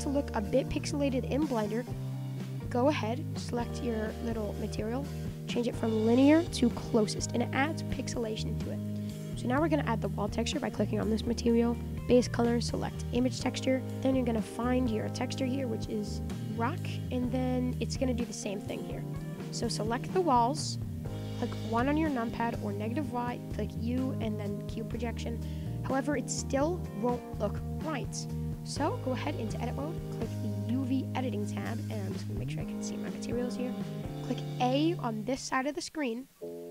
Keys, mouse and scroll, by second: 1.5 scroll down 1, 1.6-2.7 scroll up 9, 2.7 Tab, 5.8-7.2 drag, 7.2 Tab, 7.4-7.8 scroll up 9, 7.8 middle click, 8.1-10.3 scroll down 17, 8.8 middle click, 10.3 click, 12.0-14.7 drag, 17.1-18.3 middle drag, 18.3 Tab, 18.4 scroll up 3, 18.6 middle click, 19.1 click, 19.4 alt+shift+click, 20.0 alt+shift+click, 21.8 KP_1, 23.8 u, 25.0-26.4 middle drag, 26.4 Tab, 26.8-27.4 middle drag, 27.4-27.9 scroll up 4, 27.9-29.0 shift+middle drag, 29.0 Tab, 30.7 click, 32.8 click, 33.1 middle click, 36.1-36.7 middle drag.